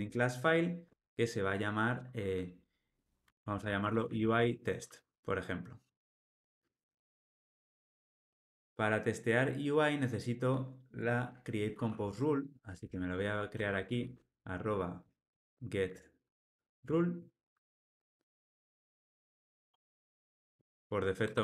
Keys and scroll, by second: 15.9 Tab, 16.8 Tab, 20.4 alt+Return.